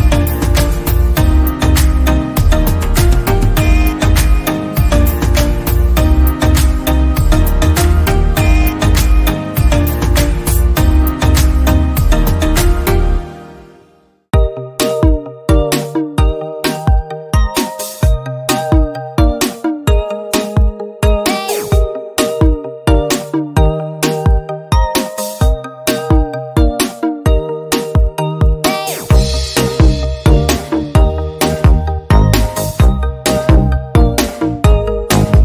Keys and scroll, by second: 1.2 ctrl+z, 1.9 ctrl+z, 27.8 ctrl+z.